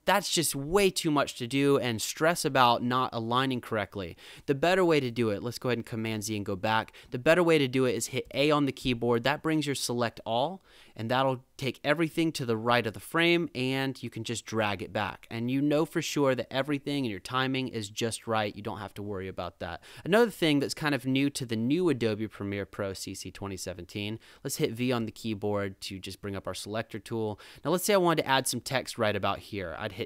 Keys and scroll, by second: 5.1 super+z, 6.1 super+=, 8.2 a, 15.1 -, 19.8 super+=, 25.0 v.